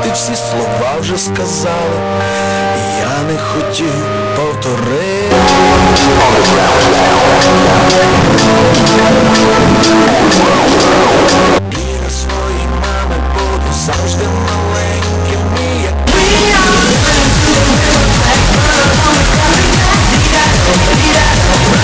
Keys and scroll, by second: 11.7 Page_Down.